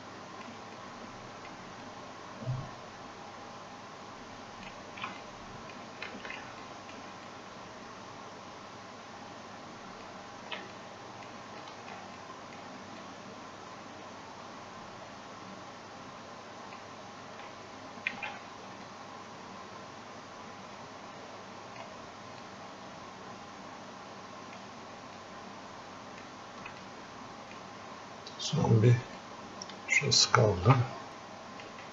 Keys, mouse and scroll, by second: 0.8 click, 1.9-5.3 ctrl+alt+shift+drag, 5.3 ctrl+click, 7.3-10.8 ctrl+alt+shift+drag, 10.8 ctrl+click, 12.3 click, 13.1-18.2 ctrl+alt+shift+drag, 18.2 ctrl+z, 18.9-26.9 ctrl+alt+shift+drag, 22.8-24.7 ctrl+alt+shift+drag, 25.5 ctrl+alt+shift+click, 27.2-28.5 ctrl+drag, 28.8 alt+click, 29.5 ctrl+alt+shift+click.